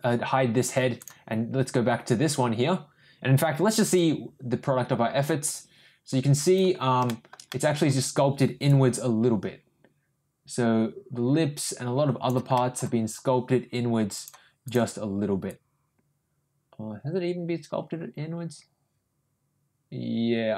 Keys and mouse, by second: 3.9-6.6 drag, 7.0 shift+middle click, 7.5 middle click, 8.8-12.3 drag, 12.5 middle click, 14.6 click, 15.5-20.5 drag.